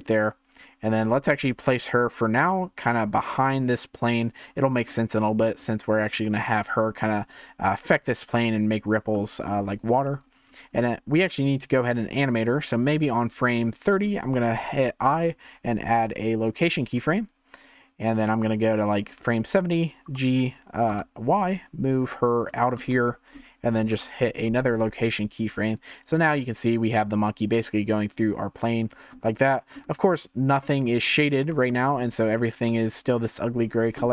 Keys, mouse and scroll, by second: 0.0-1.0 middle drag, 1.0 g, 3.5-8.6 middle drag, 9.1-10.2 middle drag, 10.2 scroll up 2, 12.5 click, 13.5-15.1 middle drag, 15.1 i, 17.6-20.1 drag, 20.1 g, 22.9-23.9 shift+middle drag, 23.9 i, 25.7-28.7 drag, 29.2-31.0 shift+middle drag, 31.0-31.7 scroll down 1, 31.7-34.1 shift+middle drag.